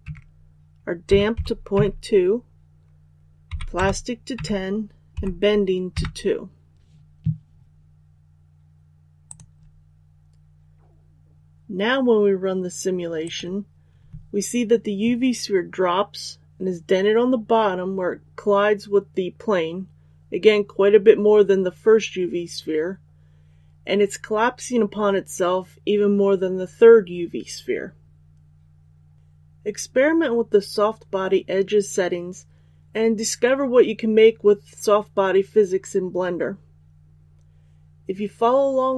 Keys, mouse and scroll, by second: 0.0 Tab, 1.0 KP_Decimal, 1.3 KP_2, 1.7 Tab, 3.4 KP_1, 3.7 KP_0, 4.3 Tab, 5.1 KP_2, 9.2 click.